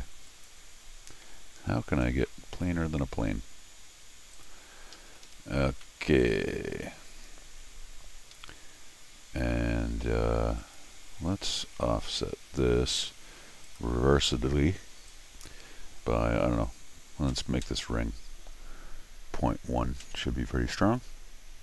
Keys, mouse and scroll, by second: 0.3 ctrl+click, 4.3 click, 4.9 Escape, 5.1 Escape, 5.3 Escape, 5.7 scroll down 2, 5.8 middle click, 8.3 Escape, 10.6 click, 11.7 o, 13.6 click, 15.1 click.